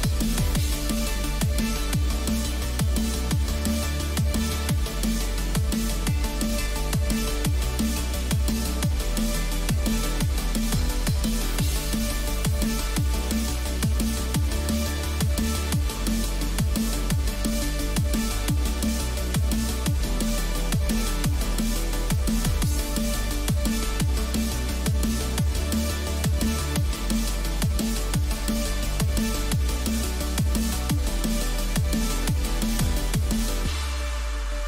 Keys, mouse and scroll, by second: 1.8-7.9 middle drag, 13.6-15.6 middle drag, 16.2-19.5 middle drag, 21.6 ctrl+z, 22.4 ctrl+z, 24.2 ctrl+z, 25.5-31.0 middle drag, 26.1 a, 28.1-29.1 right drag, 29.1 click, 33.6-34.6 middle drag.